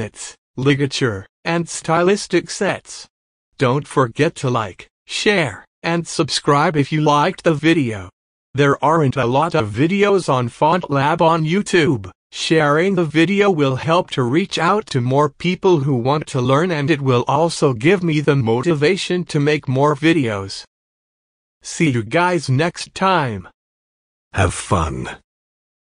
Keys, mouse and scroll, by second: 0.1 click, 1.4-1.7 typing, 1.5 click, 1.8 alt+scroll up 1, 2.0 click, 3.2 click, 3.3 space, 4.1 click, 5.4 click, 5.6 space, 6.0 click, 6.1 scroll down 1, 6.2-7.4 drag, 7.6 ctrl+z, 7.8 click, 9.0 shift+click, 9.1 space, 9.1 click, 9.2 space, 9.4 click, 11.2 space, 11.3 click, 11.3 space, 11.7 scroll down 1, 11.9 click, 12.1 space, 12.7-13.8 drag, 13.8 space, 13.9 click, 14.0 space, 14.2 click, 15.8-17.8 drag, 18.1 space, 18.4 click, 19.4 click, 19.6 space, 19.6 click, 19.7 space, 19.8 space, 20.0 click, 21.1 alt+scroll down 1, 21.4 click, 21.6 space, 22.3 space, 22.9 click, 23.1 space.